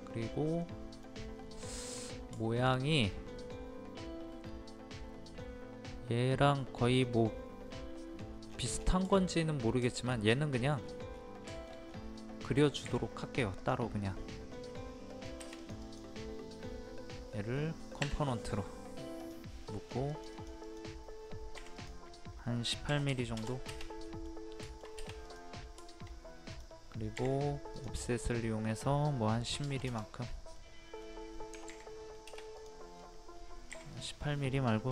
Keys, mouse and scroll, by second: 0.0-0.6 scroll up 1, 0.6 middle click, 1.6 scroll up 1, 1.7 middle click, 2.8-3.1 scroll up 1, 8.1 scroll down 1, 9.1 shift+middle click, 9.6 scroll down 1, 9.9 shift+middle click, 10.8-11.5 scroll up 1, 11.5 shift+middle click, 11.7 scroll up 1, 12.4 middle click, 13.6 click, 18.0 w, 19.2 click, 19.7 middle click, 20.1-21.7 drag, 22.9 KP_1, 24.1 middle click, 25.2 click, 26.5 click, 29.5 KP_1, 30.6 middle click, 32.5 click, 33.7 p, 33.9 click.